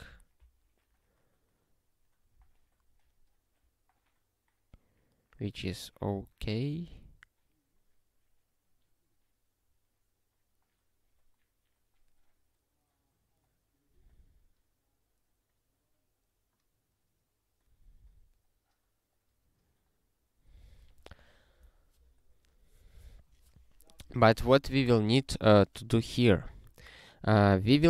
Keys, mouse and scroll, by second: 27.6 click.